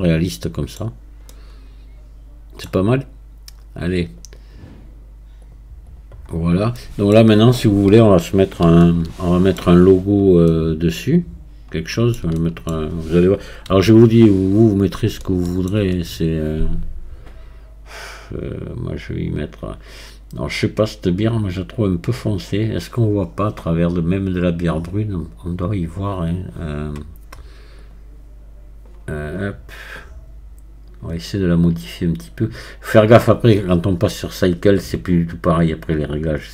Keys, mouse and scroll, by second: 0.9-1.3 scroll down 1, 1.3-4.2 middle drag, 4.2-6.3 right drag, 6.3-6.8 scroll down 4, 6.8-13.7 middle drag, 13.7 KP_1, 14.7-15.2 scroll up 1, 15.2-18.2 shift+middle drag, 20.4-21.1 scroll down 1.